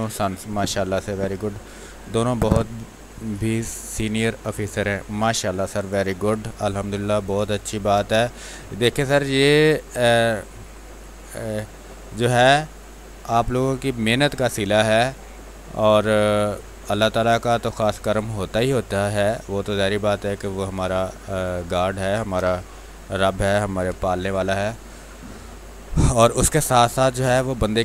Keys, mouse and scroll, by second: 7.6 space, 8.1 ctrl+click, 9.7-14.1 drag, 14.1 space, 14.3 click, 14.6 space, 15.3 x, 15.5 click, 16.3 x, 16.8-18.0 drag, 18.0 space, 18.5 alt+click, 19.1 click, 22.6 r, 22.8 click, 25.1 ctrl+d, 25.8 click, 27.2 space, 27.4 click, 27.7 space.